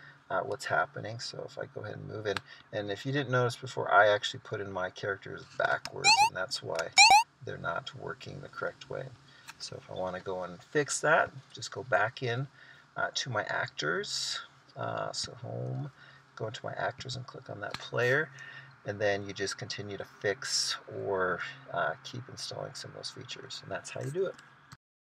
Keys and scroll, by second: 1.6 Right, 2.9 Left, 4.2 Right, 6.1 Left, 6.2 space, 6.8 Right, 7.1 space, 7.9 Left, 9.2 Right.